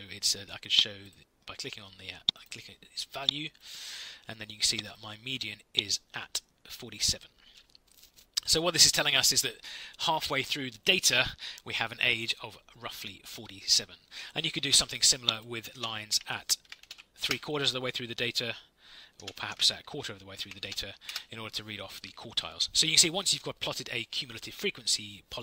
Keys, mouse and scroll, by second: 15.4-17.3 typing, 18.9-21.1 typing.